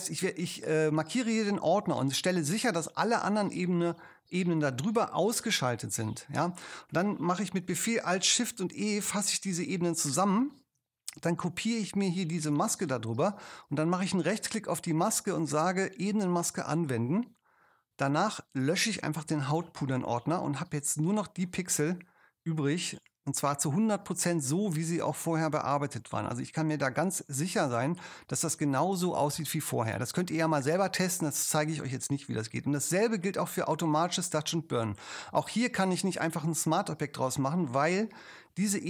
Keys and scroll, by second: 9.6 alt+shift+super+e, 19.5 BackSpace.